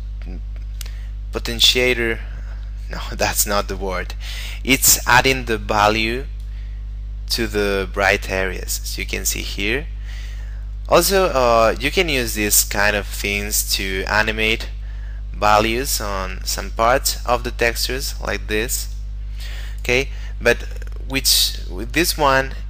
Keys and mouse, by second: 4.6 shift+middle click, 6.6 click, 19.0 click, 20.5 middle click, 21.7 shift+middle click.